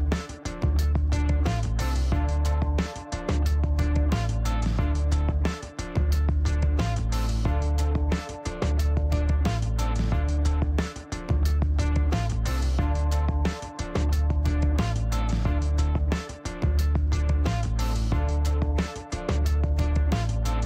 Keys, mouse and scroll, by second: 0.4 middle click, 0.9 scroll up 1, 1.1 middle click, 3.1 right click, 3.5 click, 6.1 click, 6.7 click, 8.5 click, 9.8 click, 10.1 right click, 10.8 click, 12.8 click, 16.0-17.3 typing, 17.3 Return, 18.9-19.9 drag, 20.3 click.